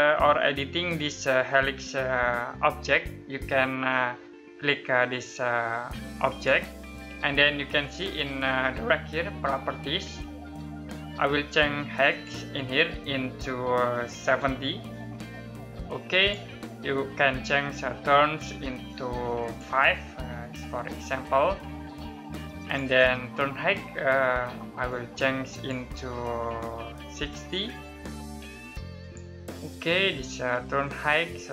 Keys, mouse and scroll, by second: 5.9 click, 11.7 click, 13.8-14.3 typing, 15.7 click, 18.5 click, 19.8 typing, 22.2 click, 26.7-27.2 typing, 28.6 click, 29.4 scroll down 1, 30.1 middle click, 30.6-31.4 scroll up 1, 31.4-31.5 scroll down 1.